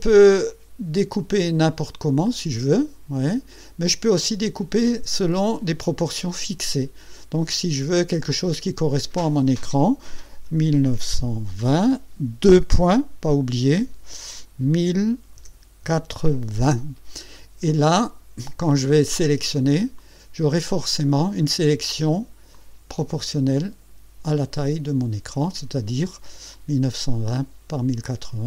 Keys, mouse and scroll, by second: 1.0 click, 1.8-3.7 drag, 5.1 click, 7.4-9.3 drag, 10.5 KP_1, 10.8 KP_9, 11.2 KP_2, 11.7 KP_0, 14.7 KP_1, 15.4 KP_0, 15.8 KP_8, 16.6 KP_0, 20.0-21.5 drag, 22.5-24.1 drag, 24.5 click, 26.5 click.